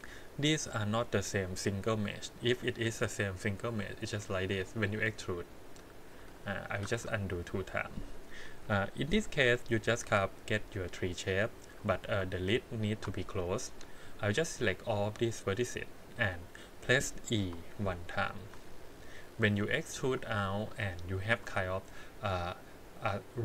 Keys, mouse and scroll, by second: 0.0-0.5 scroll up 1, 0.5 click, 1.3 middle click, 2.5 middle click, 3.6 e, 5.1 middle click, 6.3 ctrl+z, 6.8 ctrl+z, 7.4 middle click, 8.6 KP_1, 9.4 click, 9.7 scroll down 1, 10.9 middle click, 11.7 1, 12.5 alt+click, 15.1 click, 17.4 KP_1, 18.5 e, 20.8 middle click.